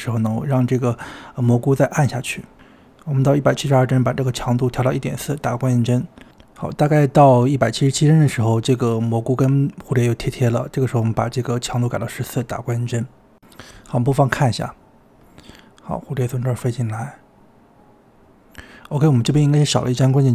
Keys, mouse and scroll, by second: 1.4-5.8 drag, 8.3 Left, 11.5 drag, 12.6 click, 14.6-16.0 drag, 16.0 space.